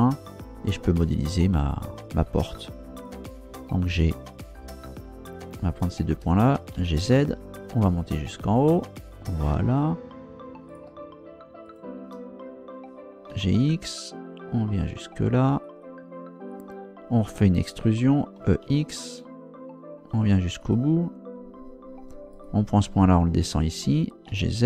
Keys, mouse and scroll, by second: 3.0 right click, 5.8 shift+right click, 6.7 g, 7.0 z, 9.1 click, 10.7 shift+right click, 11.6 shift+right click, 13.3 g, 13.5 x, 15.6 click, 18.4 e, 18.6 x, 20.6 click, 22.3 right click, 24.3 g.